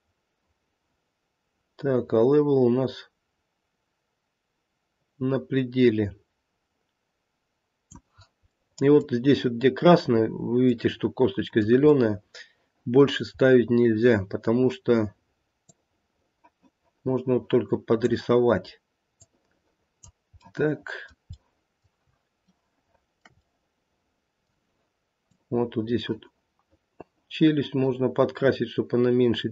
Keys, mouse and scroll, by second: 8.5 middle click, 8.8 middle click, 10.9 middle click, 11.3 middle click, 11.6 middle click, 11.9 middle click, 13.3 scroll up 1, 15.7 click, 19.2 click, 20.3 middle click, 21.0-21.8 middle click, 21.6 middle click, 22.5-23.2 shift+middle click, 23.1 middle click, 23.4 middle click, 25.3 click.